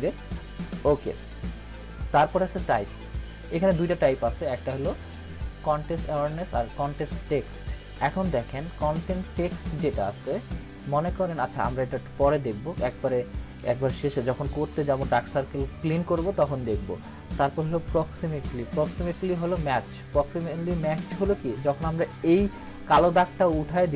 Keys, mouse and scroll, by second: 0.2 click.